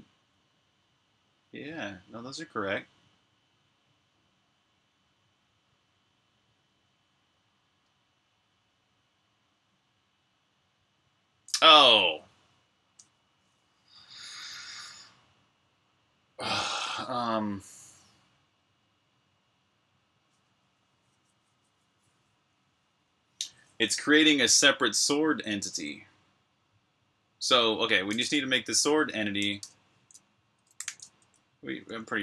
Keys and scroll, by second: 28.9-32.2 typing.